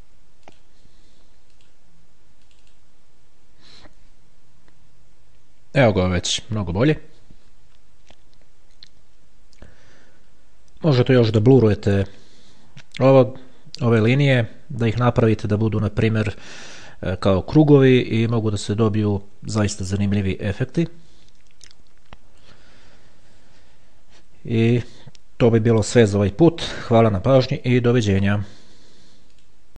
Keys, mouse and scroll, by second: 0.8 click, 1.9 click, 2.7 click.